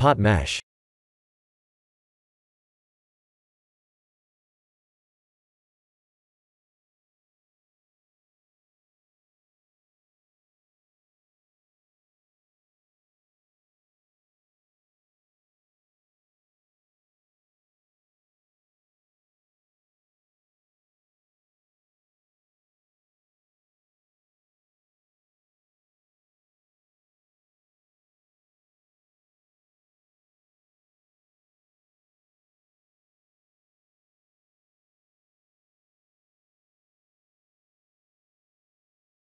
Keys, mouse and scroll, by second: 3.5 shift+middle click, 4.2 shift+middle click, 4.2 g, 6.1 shift+d, 8.2 shift+z, 8.7 scroll down 3, 9.0 middle click, 10.1 KP_3, 10.4 KP_1, 11.6 g, 15.2 r, 16.7 shift+d, 17.5 r, 18.6 g, 22.5 shift+d, 23.6 r, 25.4 shift+d, 27.6 r, 29.6 g, 29.6 shift+d, 31.7 r, 36.2 middle click, 36.3 middle click, 37.1-38.1 scroll down 3, 37.6 middle click, 38.1 click, 38.3 shift+z, 38.7 middle click.